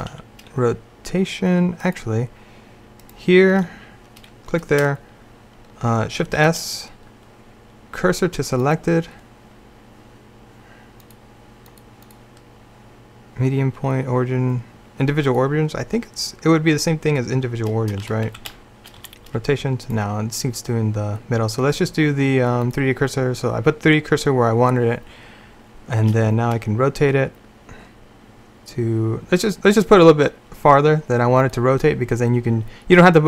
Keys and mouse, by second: 0.2 r, 3.4-6.3 right drag, 6.3 shift+s, 11.1 click, 18.1 a, 18.4 a, 19.1 r, 26.3 r.